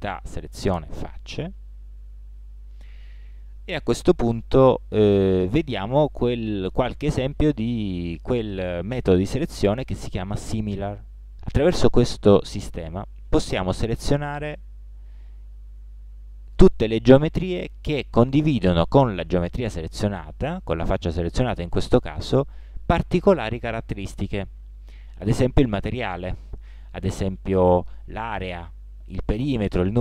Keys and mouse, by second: 1.4 a, 2.2 middle click, 4.8-5.5 middle drag, 17.5 shift+g.